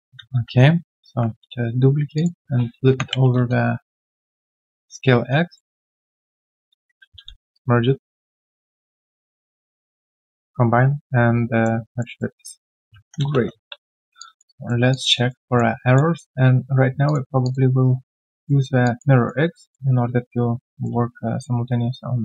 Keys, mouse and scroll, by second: 0.0-1.0 typing, 2.6-3.6 typing, 5.5 alt+middle click, 6.4 shift+click, 7.2 ctrl+alt+q, 7.6 right click, 9.4 shift+right click, 12.0 alt+middle click, 12.4 alt+right click, 13.7 3, 14.2 alt+click, 14.5 alt+right click, 14.9 alt+click, 15.1 alt+right click, 15.4 alt+middle click, 15.8 alt+click, 16.1 alt+middle click, 18.8 alt+click, 19.1 alt+right click, 19.6 alt+middle click.